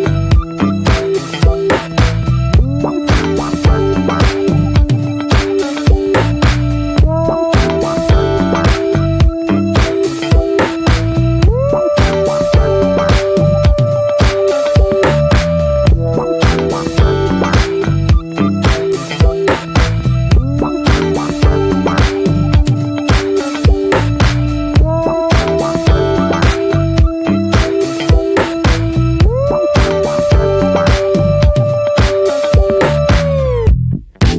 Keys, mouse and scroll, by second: 0.1 ctrl+r, 3.0 scroll down 1, 3.2-3.6 middle drag, 3.6 ctrl+s, 3.9 click, 4.1 shift+click, 4.7 click, 4.9 shift+click, 5.2 ctrl+j, 5.6 click, 5.7 scroll down 1, 5.9 middle click, 6.1 ctrl+s, 6.4-6.9 shift+middle drag, 6.9 click, 7.2 `, 7.5 middle drag, 7.8 ctrl+s, 8.3 shift+middle drag, 8.5-8.9 scroll up 1, 8.9 ctrl+r, 10.2 middle click, 10.3-10.6 scroll up 2, 10.6-11.4 shift+middle drag, 11.4 ctrl+r, 16.4 ctrl+r, 21.0-21.4 scroll down 4, 21.4 middle drag, 21.7 ctrl+s, 21.9 click, 22.3 shift+middle drag, 22.5-23.2 shift+scroll up 3, 22.8 middle click, 23.2 ctrl+r, 24.9 Tab, 25.1 click, 25.2-25.6 scroll down 6, 25.6 shift+middle drag, 25.8-26.2 scroll up 1, 26.2 click, 26.6 shift+click, 26.9 ctrl+j, 27.4 click, 27.7 middle click, 28.0 ctrl+s, 28.3 click, 28.6 middle click, 28.8-29.1 scroll down 2, 29.3 click, 29.7 middle click, 29.9-30.9 scroll up 3, 30.1 shift+middle click, 30.9 Tab, 31.3-31.9 shift+middle drag, 31.9 3, 31.9 drag, 32.3-32.9 middle drag, 32.9 x, 33.3 click, 33.5 scroll down 2, 33.7-34.0 middle drag, 34.0 ctrl+s.